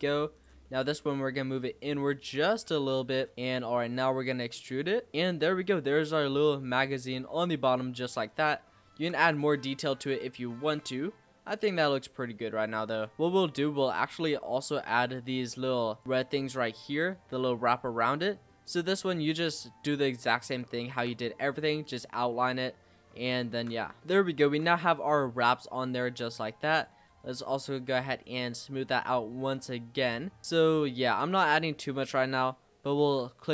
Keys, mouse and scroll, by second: 0.4 click, 0.7 middle click, 1.0-1.6 scroll up 1, 1.6 click, 3.1 click, 3.8 e, 5.1 click, 5.3 scroll down 2, 5.4-7.3 middle drag, 7.3 scroll down 1, 7.4-7.9 scroll up 3, 7.9 middle click, 8.3 click, 8.7 shift+middle click, 9.2 click, 9.6-10.2 scroll down 5, 10.2 z, 10.8-11.8 middle drag, 11.8-12.8 scroll up 1, 12.8 click, 13.1-14.7 scroll up 2, 14.7-16.8 drag, 18.0 shift+d, 20.6-21.6 shift+middle drag, 21.6-22.3 scroll up 2, 22.3 w, 23.5 ctrl+z, 24.0-26.8 middle drag, 26.8 click, 27.1-28.2 right drag, 28.2 middle click, 28.5-28.9 scroll down 2, 28.9-31.3 shift+middle drag, 31.3 click, 31.7 scroll up 2, 32.1 shift+middle click, 33.0 shift+d.